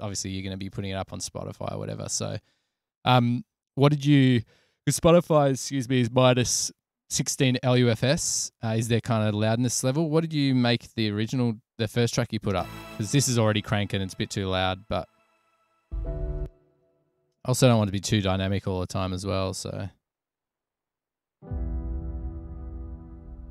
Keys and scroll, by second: 12.8 space, 16.7 space, 17.4 Return, 17.5 Return, 20.4 super+=.